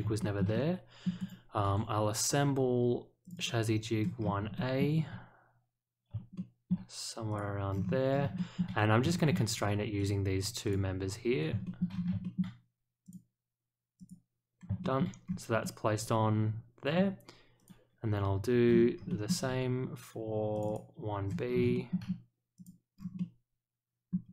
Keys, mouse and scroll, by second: 0.1 shift+middle click, 0.5-1.0 middle drag, 1.1 click, 3.2 click, 3.3 click, 4.1 scroll up 1, 4.5 shift+middle click, 6.3-6.6 shift+middle drag, 7.3 click, 7.7-8.2 scroll down 2, 8.3 shift+middle click, 9.1 shift+middle click, 9.9 click, 10.6 click, 11.6 shift+middle click, 11.9 scroll up 1, 12.2 shift+middle click, 13.0 click, 13.9 click, 14.8 shift+middle click, 15.2 scroll down 1, 15.6-16.9 middle drag, 17.5 click, 18.6-19.0 scroll up 2, 19.0 shift+middle click, 20.5 click, 20.6 click, 21.4 scroll up 1, 21.7 shift+middle click, 22.5 click, 22.9 scroll down 2, 23.1-24.1 middle drag.